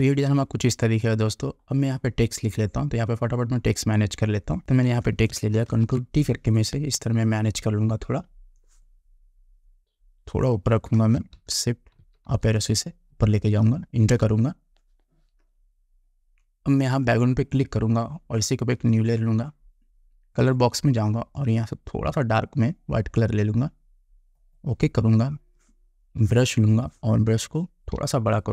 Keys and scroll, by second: 5.8 ctrl+t, 11.5 shift+Up, 14.2 Return, 28.1 ].